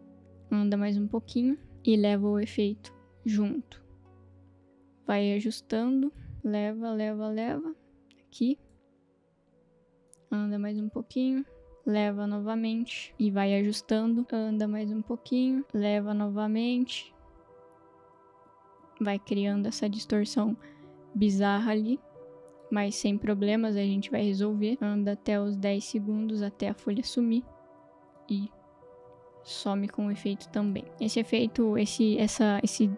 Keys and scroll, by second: 15.6 space.